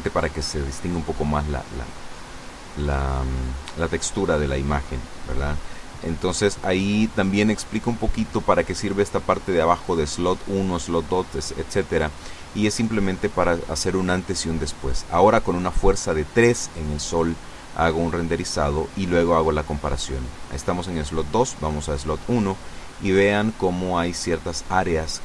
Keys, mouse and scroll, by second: 0.6 Escape, 1.2 click, 4.3 F12, 10.0 click, 11.1 click, 12.5 click, 13.5 KP_3, 13.6 KP_Enter, 14.9 F12, 21.4 click, 22.2 click, 23.3 click, 23.6-24.7 middle drag, 24.7 click, 24.9 middle click.